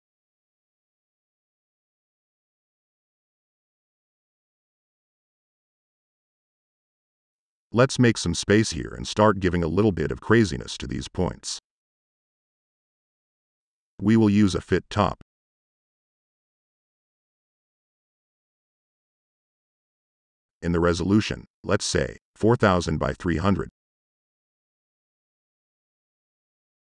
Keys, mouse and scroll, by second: 0.4 click, 3.0 click, 4.7 click, 13.0 Tab.